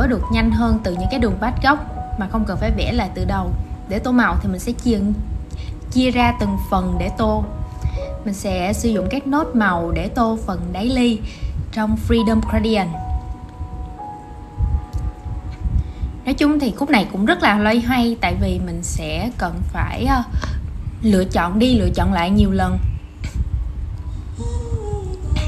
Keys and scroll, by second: 25.2 super+z.